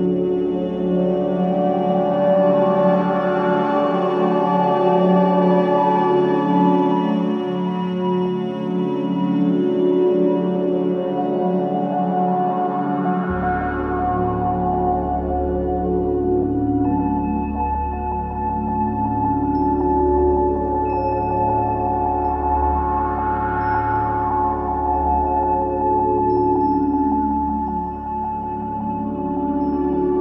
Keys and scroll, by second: 2.7 4, 7.9 3, 11.4 Escape, 15.0 F1, 15.1 F2, 17.3 F1, 17.4 F2, 24.9 4, 27.9 F9, 29.6 F1.